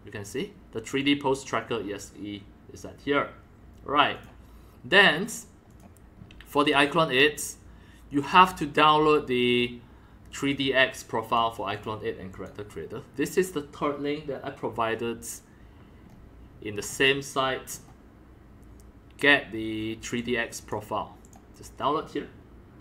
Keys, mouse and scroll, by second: 1.0 click, 2.2-4.1 drag, 4.1 click, 5.7 click, 6.1-7.3 drag, 7.3-8.3 scroll down 1, 8.2-12.4 drag, 16.0 scroll down 3, 16.3-16.7 scroll up 5, 16.7-17.8 scroll down 3, 17.8-19.4 scroll up 1, 19.4-20.7 scroll up 1, 20.2-22.8 drag, 20.7 scroll up 1.